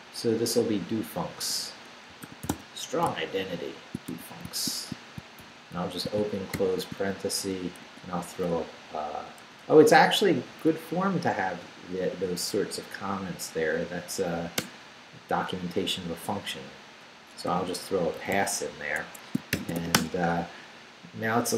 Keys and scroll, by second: 1.4-3.1 typing, 4.1 shift+s, 5.4 shift+9, 5.8 shift+0, 6.5 shift+;, 7.4 shift+Return, 7.8 Tab, 9.4 BackSpace, 10.5 Down, 12.9 Down, 13.8 Up, 14.6 Return, 17.2-18.2 typing, 19.0 Escape, 19.3-20.3 typing.